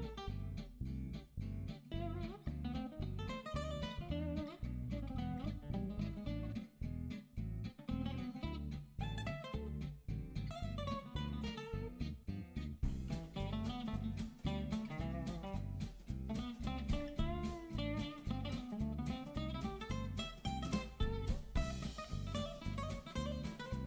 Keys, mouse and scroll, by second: 0.7 right click, 1.2 <, 1.5 middle click, 2.5 n, 2.9 click, 3.3 n, 3.8 right click, 4.0 click, 4.7 f, 5.2 click, 5.6 click, 5.9 ctrl+a, 6.2 click, 7.6 click, 8.2 click, 8.5 click, 8.5 click, 8.9-10.3 typing, 10.9 click, 14.0 click, 15.0 right click, 15.4 n, 15.5 click, 16.1 Delete, 17.0 click, 17.4 click, 18.1 <, 18.4 click, 18.6 f, 19.1 click, 20.2 click, 20.5 middle click, 20.7 click, 21.4 right click, 21.8 middle click, 22.3 scroll down 2, 22.5 middle click, 22.9 scroll up 1, 23.2 click, 23.5 f.